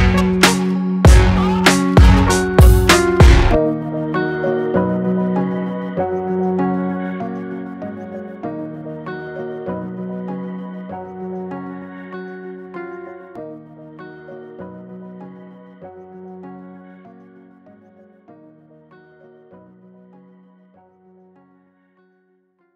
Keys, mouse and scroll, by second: 2.3 scroll up 1, 5.0 click, 5.3 space, 10.5 click, 16.8 click.